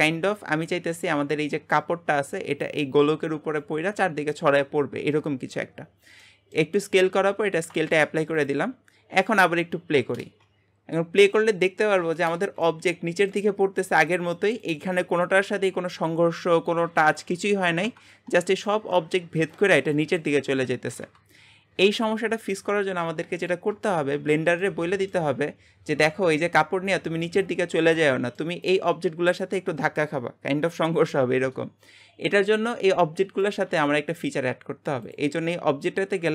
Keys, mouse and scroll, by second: 0.3-4.5 middle drag, 6.2-7.3 middle drag, 7.3 ctrl+a, 10.2 space, 12.4 space, 12.6-17.8 middle drag, 18.0-18.5 scroll down 3, 18.5-22.2 shift+middle drag, 22.2-24.4 drag, 24.4 shift+middle click, 25.3-28.1 scroll up 2, 28.1 middle click, 28.6 click, 28.9 g, 32.5 middle click, 33.4 click, 33.7 g, 35.1-36.3 drag.